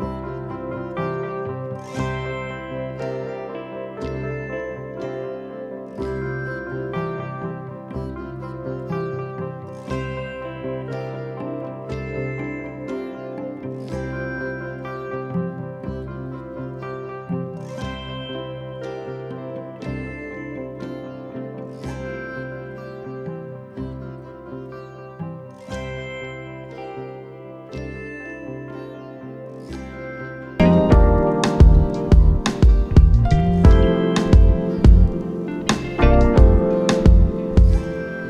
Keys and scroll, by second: 1.0 ctrl+z, 3.7 ctrl+z, 11.0 n, 15.0 n, 18.5 ctrl+z, 24.0 n, 26.2 n, 28.7 ctrl+z, 35.6 n, 37.4 n.